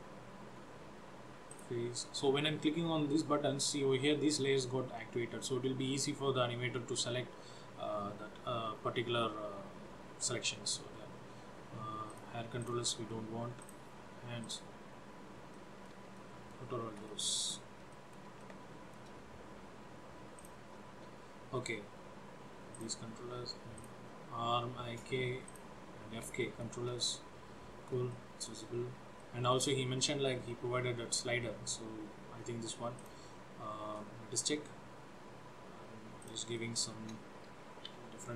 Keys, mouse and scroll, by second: 0.6 scroll up 3, 1.6 click, 8.2-8.9 scroll up 3, 8.9-11.3 scroll down 2, 12.2 click, 12.8 click, 13.7 click, 14.6 click, 15.6 middle click, 16.3 middle click, 17.2 middle click, 18.1 middle click, 18.5 shift+middle click, 19.3-20.5 scroll up 3, 20.5 click, 22.8 click, 23.9 click, 25.7 click, 26.6 shift+middle click, 27.0 middle click, 28.2 shift+middle click, 29.3 shift+middle click, 33.1 click, 36.3 click, 36.7 shift+middle click, 38.1 g.